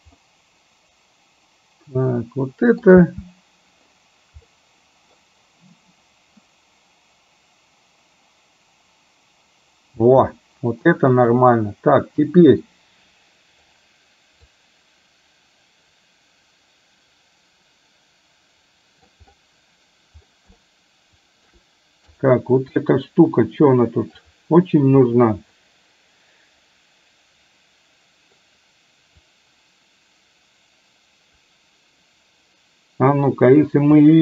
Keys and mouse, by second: 0.3-2.8 middle drag, 3.0 space, 4.5 middle click, 10.0 space, 11.2 click, 14.6-19.3 middle drag, 20.7 shift+middle click, 22.2 click, 22.8-24.2 middle drag, 25.6-28.5 middle drag, 29.5-34.1 drag.